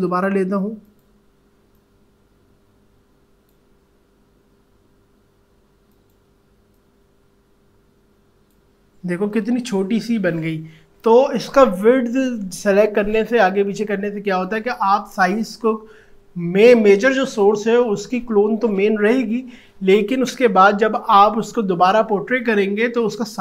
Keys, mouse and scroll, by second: 4.3 ctrl+z, 6.0-10.9 alt+drag.